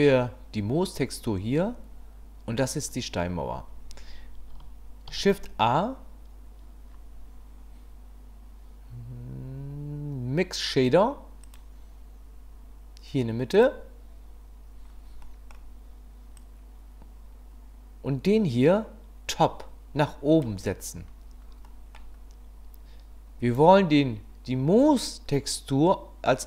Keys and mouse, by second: 5.1 shift+a, 15.3 click, 16.4-20.5 drag, 21.6 click.